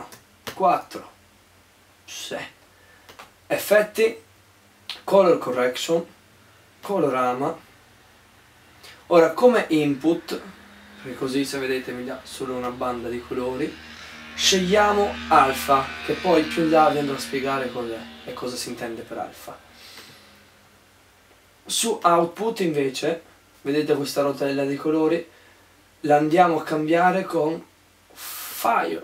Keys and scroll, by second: 0.2 4, 1.3 4.